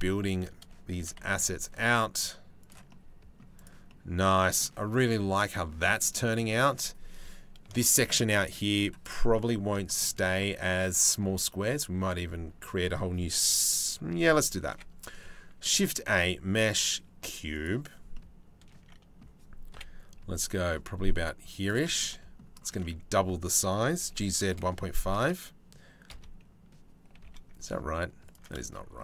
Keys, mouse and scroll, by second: 0.7 shift+d, 2.5 middle click, 3.2 middle click, 3.5 middle click, 4.2-5.3 middle drag, 5.7 middle click, 7.4 shift+middle click, 8.6 middle click, 9.0 middle click, 9.5 shift+middle click, 9.8 middle click, 14.3 KP_7, 15.2 shift+a, 17.8-18.8 middle drag, 19.3 KP_7, 20.1 g, 22.4 click, 23.6 g, 25.7 KP_3, 26.8 g, 28.4 shift+click.